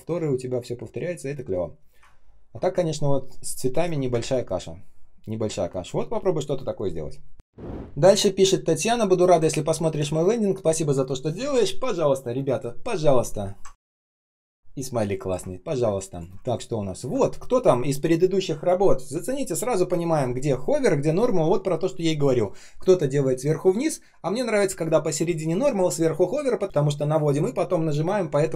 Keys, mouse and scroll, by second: 2.1 ctrl+scroll down 1, 4.0 space, 4.5 space, 4.6 space, 7.8-8.6 ctrl+scroll up 1, 9.5 ctrl+scroll down 1, 13.7 ctrl+scroll up 1, 14.4 ctrl+scroll down 1, 15.5 ctrl+scroll up 1, 15.7 space, 16.3 ctrl+scroll up 1.